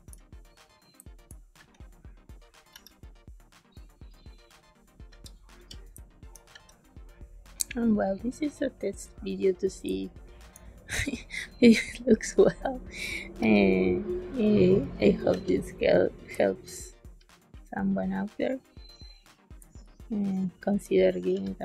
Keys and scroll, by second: 0.9 space, 1.5 b, 2.6 e, 5.0 b, 5.5 g, 5.9 space, 6.4 b, 9.8 space, 13.3 e, 15.2 b, 16.2 space, 19.5 space, 21.1 b.